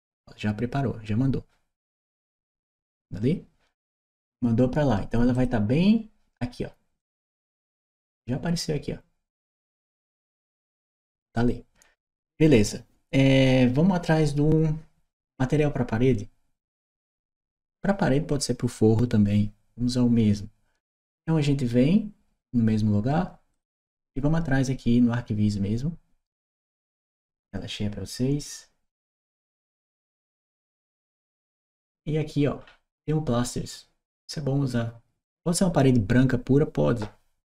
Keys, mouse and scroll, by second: 5.1 click, 6.7 click, 23.3 click, 26.7 click, 28.9 click, 31.7 scroll down 1, 32.3 scroll down 1, 35.0 click.